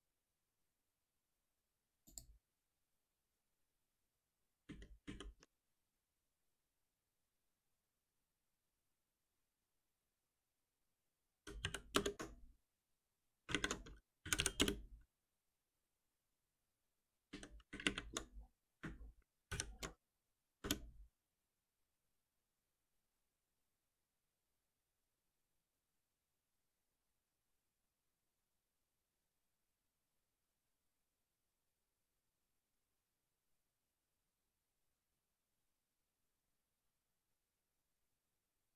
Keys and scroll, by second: 4.0 ctrl+shift+Down, 11.9 Return, 12.1 ctrl+z, 13.5 ctrl+shift+Right, 14.5 Return, 19.7 ctrl+alt+n.